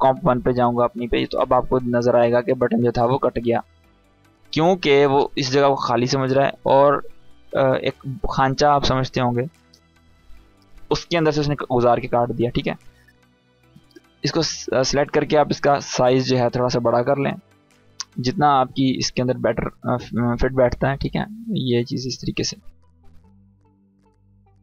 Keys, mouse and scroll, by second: 2.2 scroll up 1, 4.4 click, 7.9 click, 12.5 click, 14.4 s, 15.3-16.3 click, 16.5-17.5 scroll down 1, 17.8 click, 18.6-20.2 scroll down 1, 20.2 click, 20.2-23.5 drag.